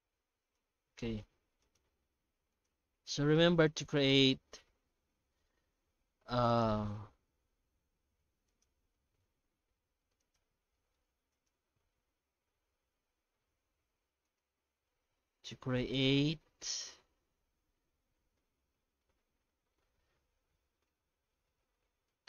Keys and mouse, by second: 1.0 shift+middle click, 1.6 right click, 2.0 Tab, 2.3 Tab, 2.5 right click, 3.0 Tab, 3.9 alt+a, 4.6 ctrl+r, 7.0 ctrl+r, 9.4 ctrl+r, 10.7 shift+middle click, 11.0 Tab, 11.3 right click, 12.3 shift+h, 13.7 alt+h, 14.2 right click, 15.9 click, 16.9 click, 17.9 shift+h, 18.3 Tab, 19.7 2, 20.2 alt+a, 20.8-22.1 drag.